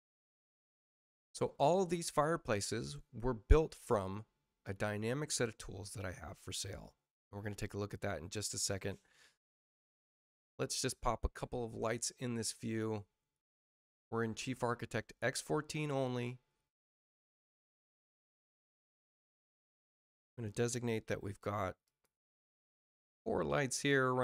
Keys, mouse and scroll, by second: 12.3 click, 14.8 space, 15.7 click, 18.4 click, 19.3 click, 21.8 click, 23.2 right click.